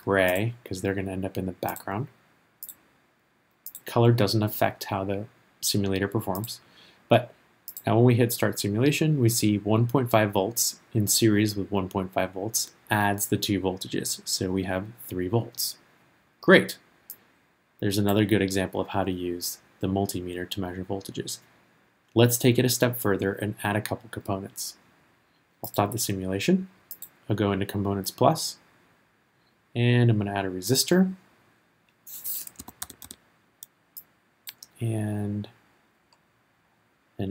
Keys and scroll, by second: 32.8 r.